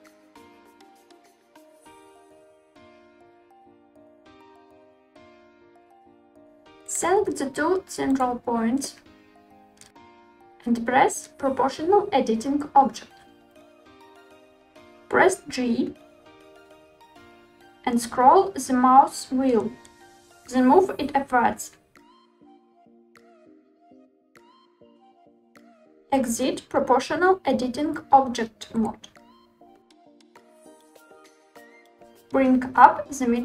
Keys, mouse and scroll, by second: 1.1 click, 1.5-2.0 drag, 2.2 s, 3.2 click, 3.5 click, 4.1 s, 4.9 click, 5.7 middle click, 7.4 click, 8.7 shift+click, 13.8 click, 14.6 g, 17.4-17.8 scroll down 2, 18.1 scroll up 1, 18.2 scroll down 2, 18.3 scroll up 1, 18.4-19.4 scroll down 7, 24.4 drag, 24.7 click, 28.7 click, 30.0 middle click, 32.3 g, 33.2 z.